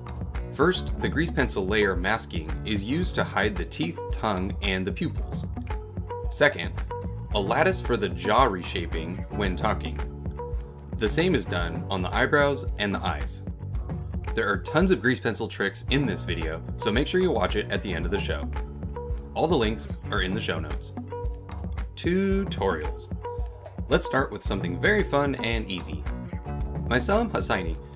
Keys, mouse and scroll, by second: 0.8 click, 1.2 click, 1.7 click, 2.4 scroll down 3, 2.6 middle click, 2.8-3.3 scroll up 1, 4.3 click, 4.3 KP_1, 5.4 g, 11.4 ctrl+Tab, 12.0 click, 14.3 click, 15.8 click, 19.0 click.